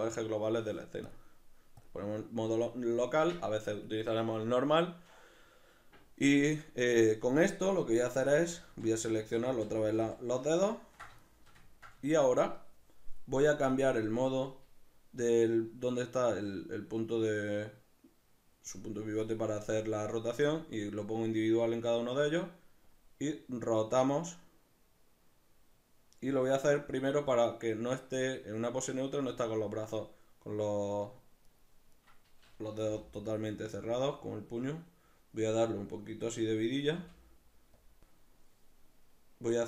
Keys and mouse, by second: 8.4 ctrl+z, 11.3-13.8 shift+middle drag, 13.8-31.6 drag, 31.6 right click, 32.9 l, 34.0-36.8 drag, 36.8 right click, 37.0 l, 37.8-39.6 drag.